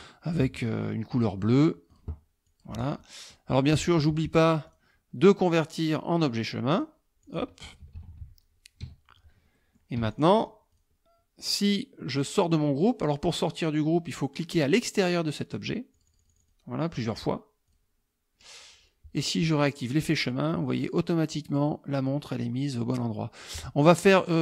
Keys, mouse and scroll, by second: 0.4 click, 1.9 click, 2.5 click, 3.1 middle click, 4.7 click, 6.8 click, 7.3 click, 7.7 KP_Subtract, 8.9 KP_Subtract, 9.6 middle click, 10.0 F1, 10.1 click, 10.7 click, 12.2 click, 16.0 click, 17.7 click, 20.1 click, 23.2 middle click, 24.2 click.